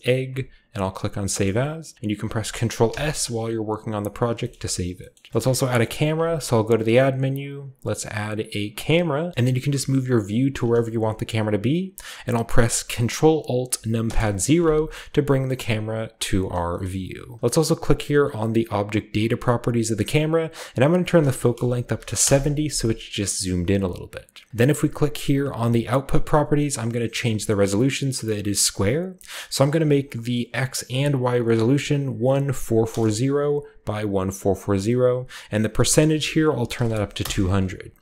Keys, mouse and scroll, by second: 0.8 click, 1.2-1.9 shift+drag, 1.3-2.3 shift+middle drag, 1.5-2.8 shift+scroll up 1, 2.8 ctrl+s, 3.8-4.3 drag, 5.3-7.3 scroll down 1, 5.6 shift+middle click, 5.8-7.3 shift+middle drag, 6.1 a, 8.7-9.3 drag, 9.3-9.7 shift+middle drag, 9.3 shift+scroll up 1, 9.6 shift+scroll down 1, 9.9-12.6 shift+middle drag, 14.0 ctrl+alt+KP_0, 16.0-17.4 drag, 19.1-22.0 drag, 21.8 typing, 22.2 Return, 25.5 click, 29.5 click, 30.9-32.5 typing, 32.8 Return, 35.6 click, 36.4-36.8 typing, 37.2 Return.